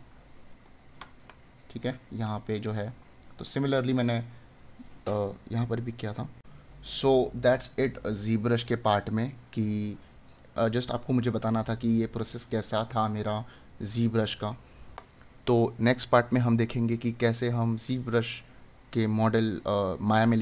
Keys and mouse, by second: 1.2 right click.